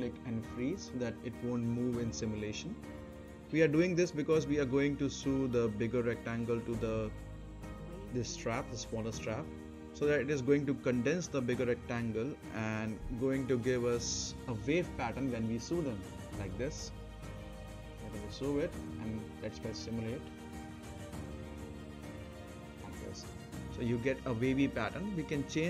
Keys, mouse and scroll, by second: 0.7 click, 2.2 right click, 2.6-3.3 scroll down 1, 3.3 middle click, 3.6 scroll down 1, 3.9 right click, 4.3 middle click, 4.6 scroll up 1, 5.1 right click, 5.6 middle click, 5.8-6.4 scroll down 1, 6.4 click, 7.3-7.9 right drag, 9.2-11.7 drag, 11.7-12.4 scroll up 1, 12.4 right click, 12.8-13.4 middle drag, 15.9 n, 17.3 click, 20.5 scroll up 1, 20.8 middle click, 21.6 space, 24.9 space, 24.9-25.6 right drag.